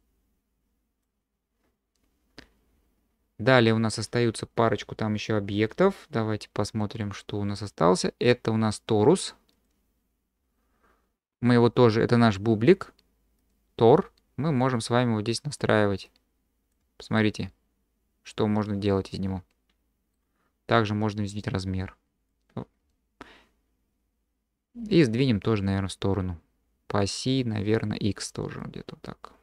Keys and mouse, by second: 6.6 q, 13.5-15.6 drag, 16.2 click, 17.2 drag, 17.2-17.8 middle drag, 17.8-18.2 drag, 18.2 middle click, 18.5-20.1 drag, 21.3-22.3 drag, 28.7-29.4 drag.